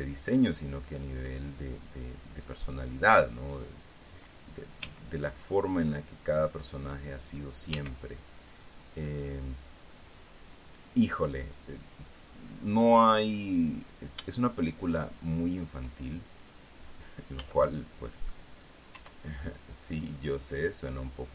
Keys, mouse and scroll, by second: 0.4-1.7 drag, 3.1 right click, 5.4 g, 6.8 click, 7.9 click, 8.3 g, 10.6 click, 12.6 click, 14.1 right click, 14.7 shift+middle click, 15.4 shift+right click, 17.9 z, 18.2 middle click, 19.5 e.